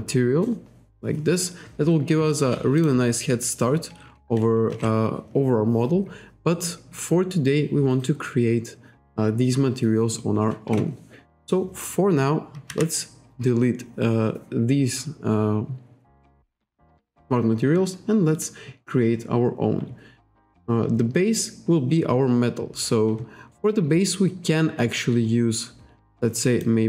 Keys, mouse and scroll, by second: 2.8 click, 4.7 alt+Tab, 11.4 click, 12.7 Delete, 23.5-24.2 scroll up 1, 24.3-24.7 scroll up 1, 25.0 scroll down 1, 25.2-25.7 scroll up 1, 26.2 click.